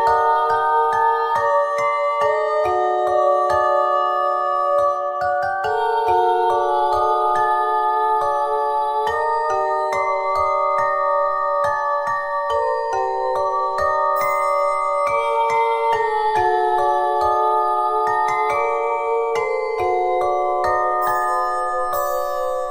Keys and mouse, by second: 0.7-2.1 drag, 1.4 g, 3.8 middle click, 5.0 w, 6.5 ctrl+z, 8.6 click, 11.6 ctrl+r, 14.7 w, 16.2 Tab, 16.9 Tab, 19.1 Tab.